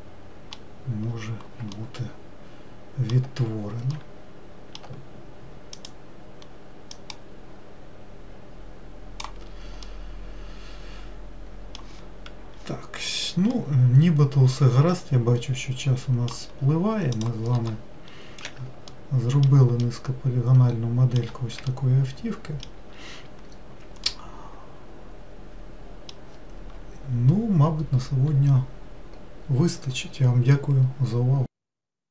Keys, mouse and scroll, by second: 1.6-2.5 scroll down 2, 2.5-6.4 shift+middle drag, 6.4 click, 7.7 click, 10.6-19.6 middle drag, 20.4-32.1 middle drag.